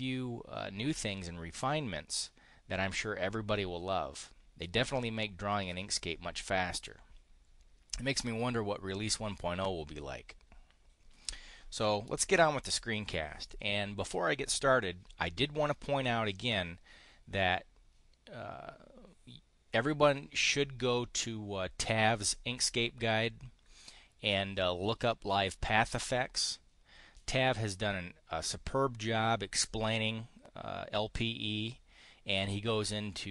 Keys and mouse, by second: 16.2 click.